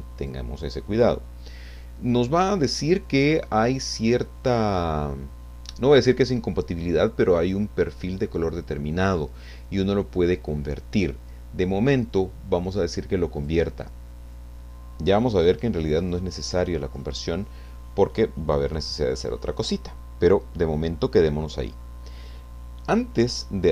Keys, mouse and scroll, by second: 0.2 click, 13.4 click.